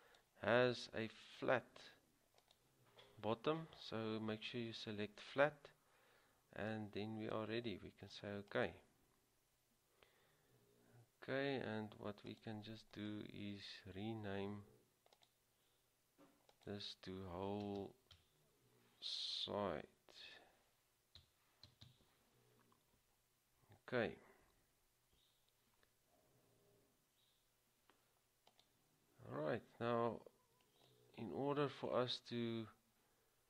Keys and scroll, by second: 21.1-21.8 typing.